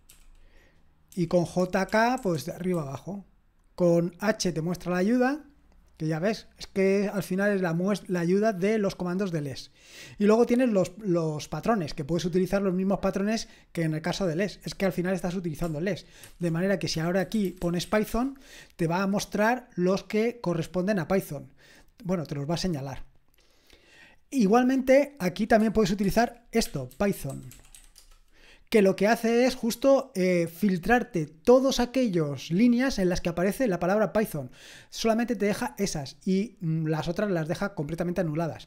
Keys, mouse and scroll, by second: 0.0-3.2 typing, 9.1-13.3 scroll down 1, 13.3-14.7 scroll down 1, 14.7 typing, 16.2-18.3 typing, 26.0-28.2 typing.